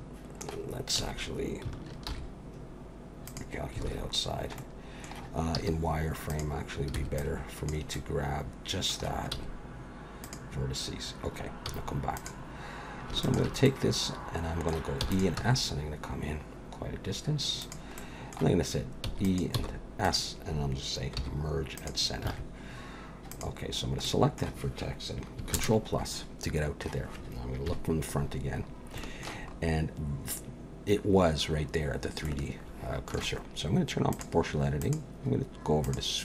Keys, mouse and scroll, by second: 1.0 a, 2.1 alt+n, 3.9 alt+a, 4.6 middle click, 5.6 z, 7.0 b, 7.9 middle click, 9.3 x, 11.7 z, 13.2 alt+shift+click, 13.6 middle click, 14.2 middle click, 15.0 e, 15.4 s, 18.0 middle click, 19.0 e, 19.5 s, 21.2 m, 22.3 alt+a, 23.3 click, 24.0 middle click, 25.5 ctrl+KP_Add, 26.7-27.1 scroll down 1, 27.7 KP_1, 28.5-30.2 scroll up 5, 29.0 shift+middle click, 32.2 shift+middle click, 34.1 click, 34.8 click.